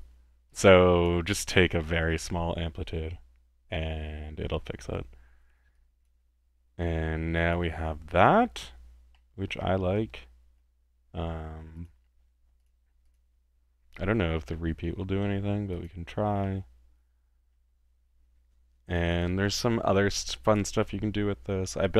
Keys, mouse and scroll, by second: 0.5-1.2 drag, 1.8-3.3 middle drag, 5.7-6.5 drag, 6.8 middle click, 7.4-7.9 drag, 8.2 drag, 9.1-10.6 middle drag, 11.7 click, 12.6 click, 13.0 click, 15.7 click, 16.4-17.6 middle drag, 19.0-19.3 drag, 19.4-20.2 middle drag, 20.2 click.